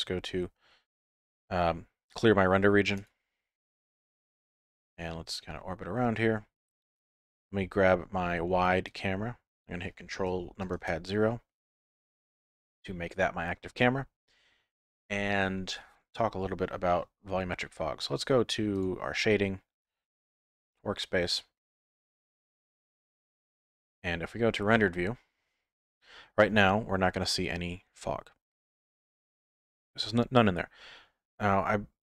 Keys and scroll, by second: 10.8 ctrl+KP_0.